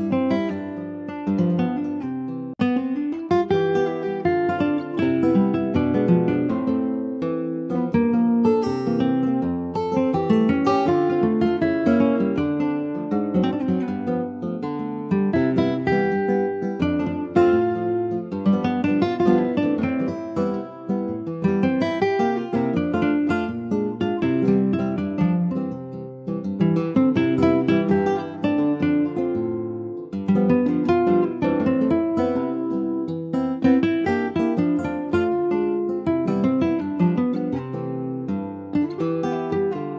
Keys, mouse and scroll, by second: 0.5 alt+z, 1.3 scroll up 1, 1.6-2.5 scroll down 3, 1.9 click, 2.5 click, 4.5 scroll up 1, 5.3 ctrl+z, 5.9 ctrl+z, 6.4 scroll down 2, 8.8 ctrl+click, 10.1-11.3 scroll up 2, 11.3 s, 14.1 scroll down 1, 15.4 scroll up 1, 15.9 ctrl+s, 16.7 click, 18.6 shift+click, 19.7 s, 22.4 click, 22.9 shift+middle click, 23.5-23.8 scroll down 1, 23.8 ctrl+s, 24.2 alt+z, 25.2 alt+z, 28.8 ctrl+s, 29.0 click, 30.1 Tab, 30.7 Tab, 31.8 click, 32.2 Tab, 34.2 click, 34.6 Tab, 36.4 alt+z, 37.0 click, 37.4-39.7 drag.